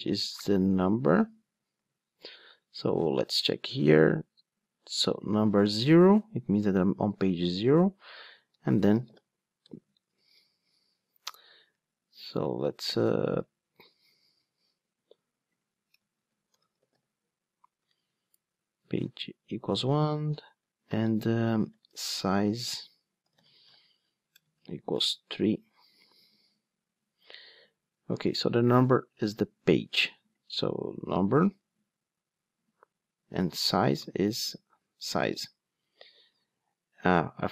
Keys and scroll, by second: 31.4 super+p, 34.4 Return.